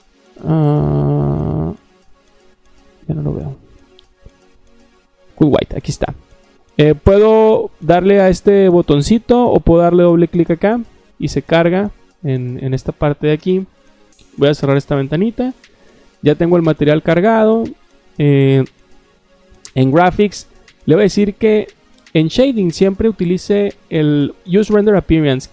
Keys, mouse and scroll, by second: 1.1 scroll down 1, 1.1-2.4 scroll up 1, 5.5 click, 10.3 click, 10.5 click, 14.1 click, 19.4 click, 24.4 click.